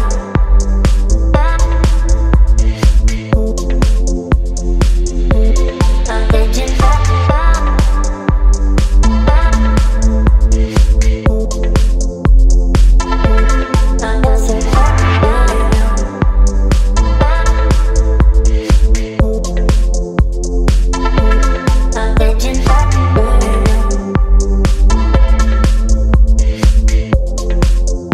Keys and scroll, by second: 1.1 Delete, 2.4 space, 4.0 ctrl+BackSpace, 6.3 space, 8.1 ctrl+t, 9.5 Return, 11.2 space, 11.8 Up, 13.1 Delete, 14.3 Delete, 15.1 Delete, 15.7 space, 16.3 Delete, 18.3 Delete, 19.1 space, 20.9 ctrl+BackSpace, 23.7 Delete, 24.9 Delete, 25.5 Delete, 26.1 space.